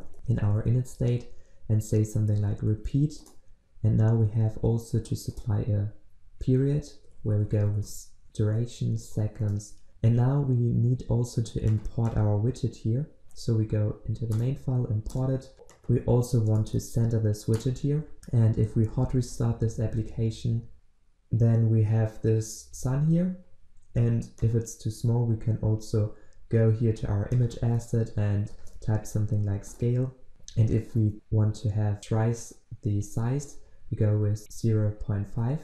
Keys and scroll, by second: 3.2 Return, 4.4 Return, 9.5 Return, 9.9 ctrl+alt+Left, 14.4 alt+Return, 19.2 ctrl+shift+\, 24.5 ctrl+b, 28.6 ctrl+space, 30.0 Return.